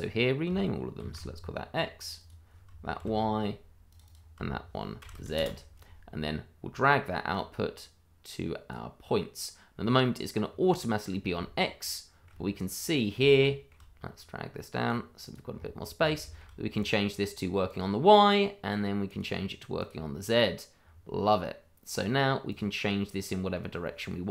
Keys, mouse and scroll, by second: 1.0 shift+x, 2.0 click, 2.3 double click, 3.0 shift+y, 3.9 click, 4.1 double click, 5.0 shift+z, 5.3 Return, 7.3 click, 9.7-11.3 scroll down 1, 11.4 middle click, 11.5 shift+middle click, 12.5 middle click, 13.3 shift+middle click, 13.3 middle click, 13.5 shift+middle click, 14.8 click, 15.5-16.0 scroll up 1, 16.2 shift+middle click, 16.2 middle click, 16.8 click, 21.1-21.9 scroll down 1, 21.9 click, 23.2 middle click.